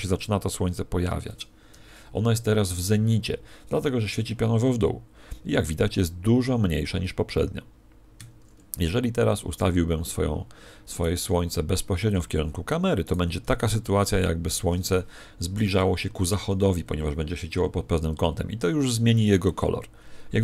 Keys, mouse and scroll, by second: 0.1 r, 1.3 click, 8.1 Escape, 10.9 right click, 11.2 r, 12.1 click, 13.2 right click, 13.8 r, 15.7 click.